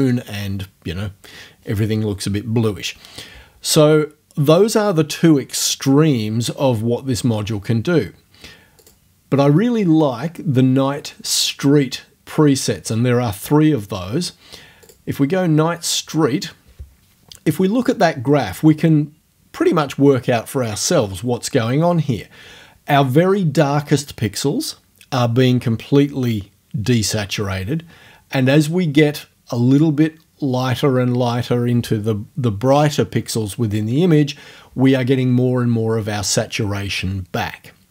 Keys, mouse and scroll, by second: 8.8 click, 9.1-10.1 middle drag, 14.9 click.